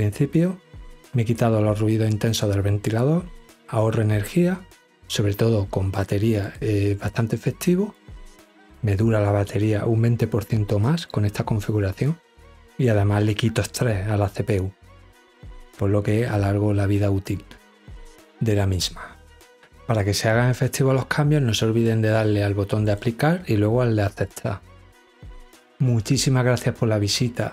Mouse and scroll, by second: 5.9 click, 7.4 click, 10.5 click, 22.1 click, 23.5 click.